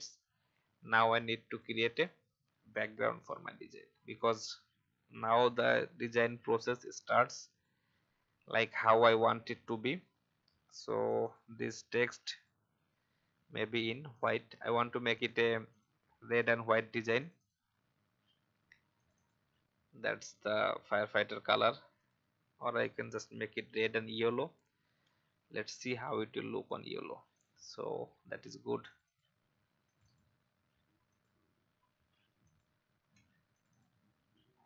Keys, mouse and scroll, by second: 7.5 click, 9.2 alt+scroll up 1, 11.0 click, 18.2 alt+scroll up 1, 18.9-20.1 drag, 23.7 i, 24.3 click, 27.8 scroll down 1, 28.9 click, 34.5-34.6 scroll up 1.